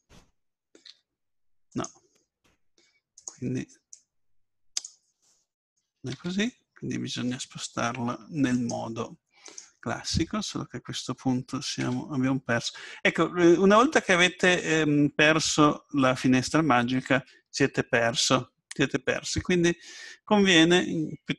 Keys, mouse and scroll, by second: 0.9 r, 3.2-5.9 drag, 5.0-6.1 right drag, 6.1 ctrl+z, 8.5-11.4 right drag, 11.8 Tab, 14.0-15.4 middle drag.